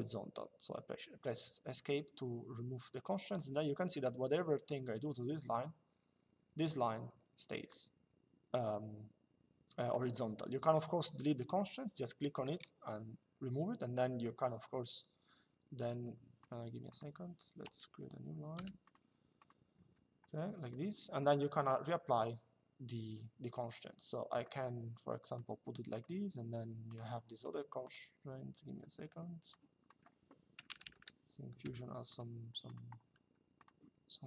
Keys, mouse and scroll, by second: 3.1 click, 9.5 click, 12.0 Delete, 13.9 click, 16.6 click, 17.3 Delete, 18.3 click, 19.5 Escape, 20.3 click, 24.1 click, 25.7 click, 28.4 Escape, 29.2 click, 31.3 l, 32.7 Escape, 33.3 click.